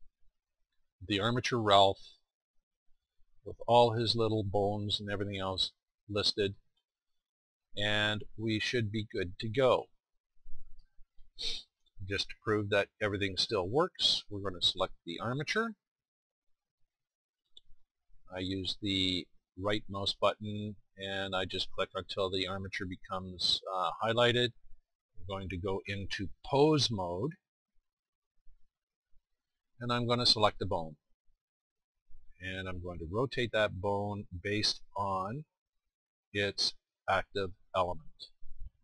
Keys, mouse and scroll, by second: 8.9-10.7 drag, 10.7-12.3 middle drag, 15.8 click, 18.8-22.3 drag, 35.0-36.0 drag.